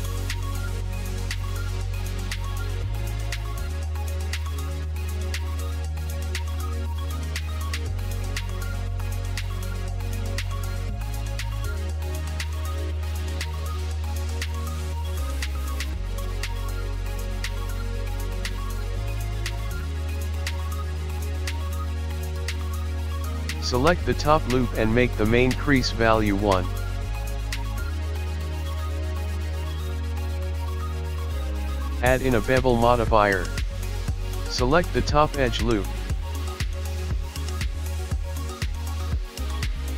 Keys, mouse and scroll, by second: 0.1 click, 0.5 click, 1.6 click, 9.3 Tab, 10.9 ctrl+r, 15.5 click, 17.8 alt+click, 20.6 click, 21.7 alt+shift+click, 23.0 alt+shift+click, 26.1 n, 28.0 click, 29.6 click, 30.5 click, 32.7 Tab, 33.9 click, 35.1 click, 36.0 click, 36.3 KP_1, 37.0 click, 37.2 right click, 38.8 click.